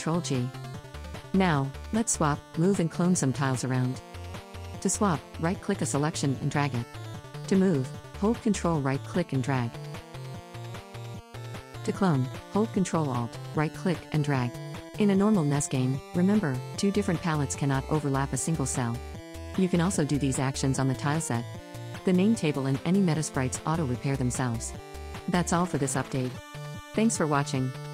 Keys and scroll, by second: 1.6 Right, 10.6 ctrl+z, 12.0 ctrl+z, 12.6 h, 22.6 shift+d.